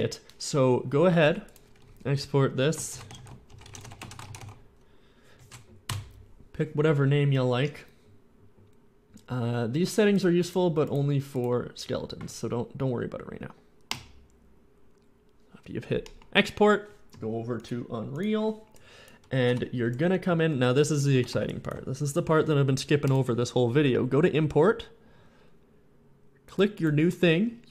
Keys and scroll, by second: 2.7-4.5 typing, 5.7 Return, 6.0 Return, 19.3 F11, 19.8 F11, 20.0-21.7 typing.